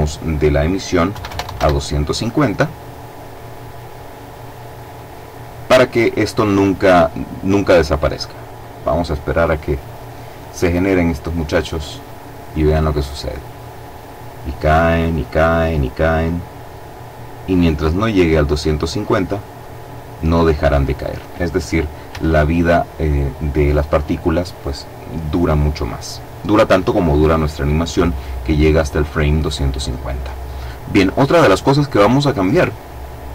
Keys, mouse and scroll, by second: 0.8 KP_2, 1.1 KP_5, 1.3 KP_Enter, 5.8-6.8 scroll down 2, 14.1-15.3 scroll down 2, 15.3-16.0 scroll down 1, 18.3-19.7 scroll up 2, 19.7-20.7 scroll up 1, 21.8 Escape, 25.8-26.5 scroll down 2, 32.0 click.